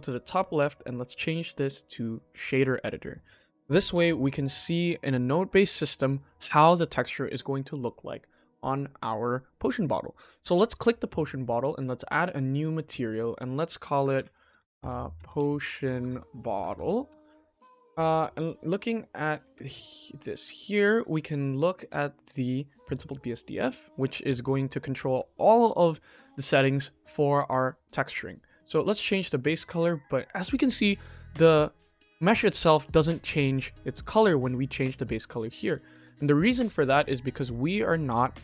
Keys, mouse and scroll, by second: 0.1-2.3 drag, 3.8 n, 4.6-4.9 shift+middle drag, 5.2 scroll up 2, 5.5-5.9 shift+middle drag, 10.5 click, 12.5 click, 13.2 click, 14.5 BackSpace, 16.1 click, 16.5 t, 18.1 shift+middle click, 18.8 shift+middle click, 19.7-20.8 ctrl+middle drag, 21.1 shift+middle click, 24.8 click, 28.4 click, 35.0 click, 35.2 ctrl+z, 35.6 ctrl+z, 36.2 click, 36.6 ctrl+s, 37.5 click.